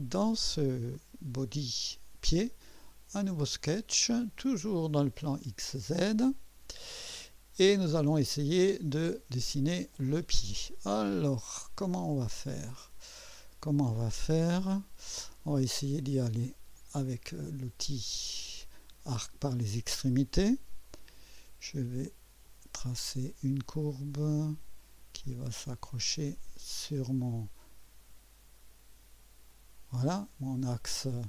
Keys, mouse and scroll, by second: 3.3 click, 5.3 click, 6.2 click, 7.2 scroll up 1, 7.9-9.0 right drag, 12.4 scroll down 1, 16.7 click, 19.2 click, 22.4 click, 29.5 click.